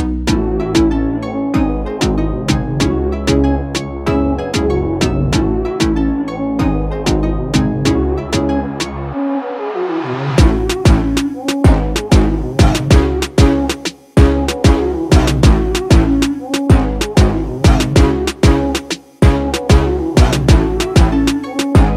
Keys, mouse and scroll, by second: 0.0 click, 1.8 shift+click, 9.0 ctrl+z, 9.9-17.0 drag, 17.0 ctrl+d.